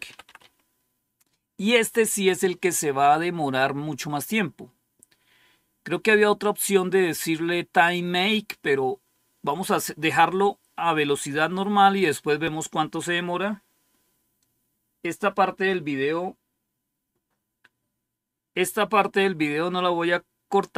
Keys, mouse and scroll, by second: 0.0-0.8 typing.